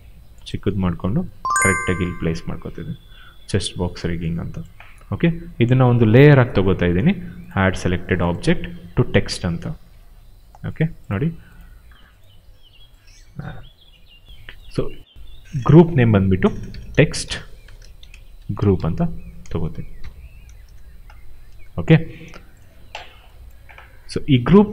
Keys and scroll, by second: 0.6 w, 16.3-19.9 typing, 20.5 Return.